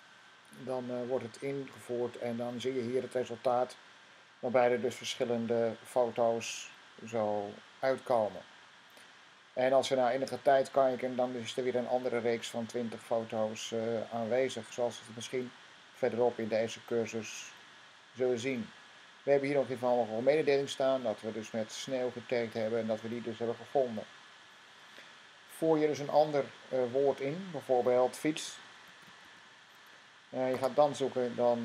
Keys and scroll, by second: 0.7-1.4 typing, 28.1-29.6 typing.